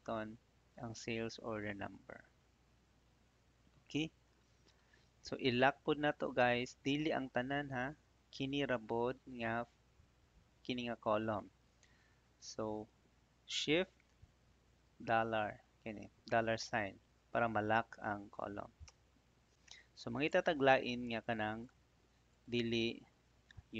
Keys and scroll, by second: 14.5 shift+4, 18.8 Return.